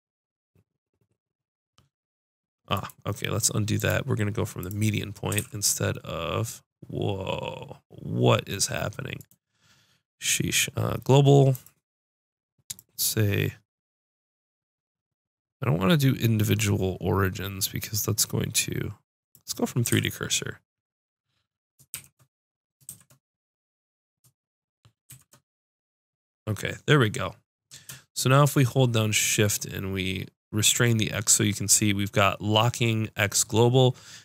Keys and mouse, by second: 3.8 click, 5.3 s, 9.3 right click, 14.0-19.0 drag, 19.0-22.8 middle drag, 19.8 s.